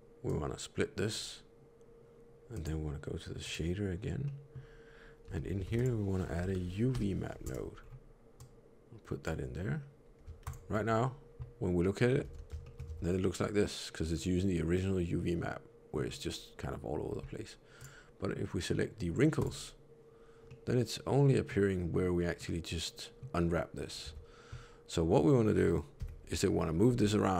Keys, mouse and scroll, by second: 0.1 click, 2.4 click, 4.1 middle click, 5.1 n, 5.6 shift+a, 7.7 scroll up 2, 8.3 click, 10.4 ctrl+shift+click, 12.2 alt+a, 12.5 shift+middle click, 12.8 Tab, 13.1 middle click, 17.7 click, 20.4 middle click, 22.2 middle click, 24.0 Tab, 25.9 l, 26.7 g.